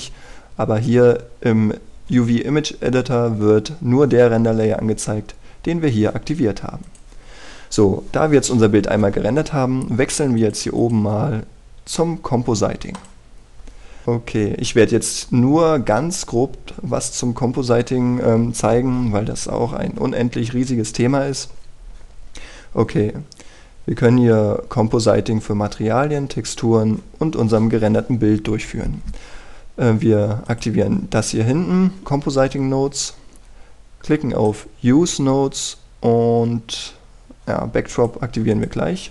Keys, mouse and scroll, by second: 7.8-39.1 drag.